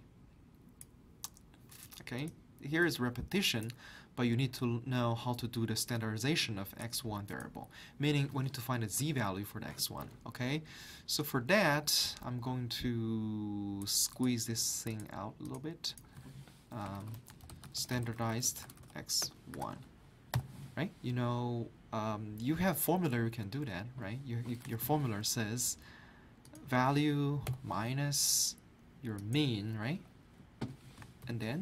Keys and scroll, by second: 9.0 alt+Tab, 16.7-19.5 typing, 19.5 Return, 24.6-25.3 typing, 27.5 -, 31.2 ).